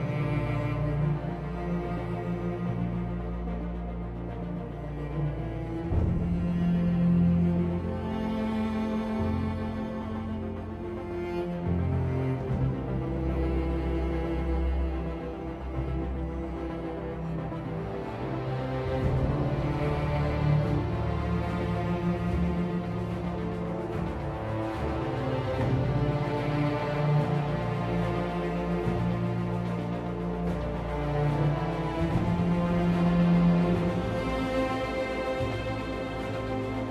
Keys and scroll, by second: 7.9 Home, 9.8 ctrl+z, 12.0 ctrl+z.